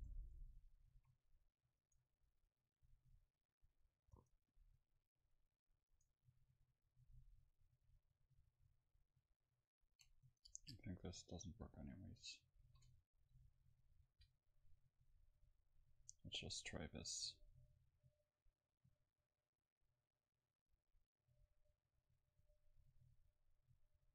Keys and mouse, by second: 0.2 ctrl+z, 0.2-4.0 right drag, 4.0 a, 9.1-13.8 middle drag, 13.8 Delete, 13.8 ctrl+s, 17.1 F12.